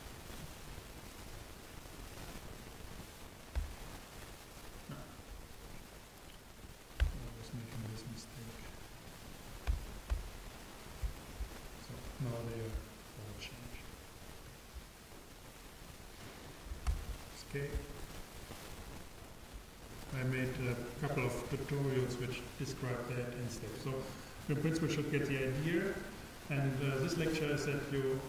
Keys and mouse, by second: 0.5-2.4 super+right drag, 3.5 z, 9.7 g, 11.1-13.5 drag, 16.9 Tab, 20.9-22.7 drag.